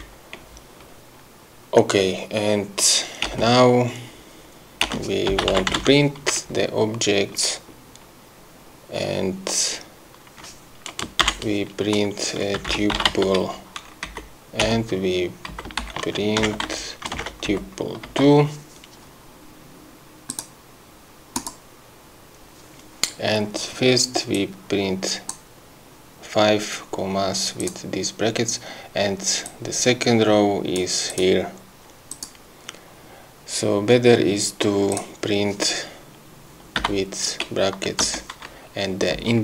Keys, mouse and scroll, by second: 3.4 Return, 5.0 Return, 5.2-6.4 typing, 12.5-13.7 typing, 14.2 Right, 14.7 Return, 15.6 Up, 15.9 shift+End, 16.6 ctrl+c, 16.8 ctrl+Down, 17.3 ctrl+v, 17.6 ctrl+Left, 18.2 2, 20.4 click, 21.5 click, 24.4 click, 27.7 click, 29.5-31.1 drag, 31.2 click, 32.2 click, 35.0 click, 38.1 0, 39.3 Left.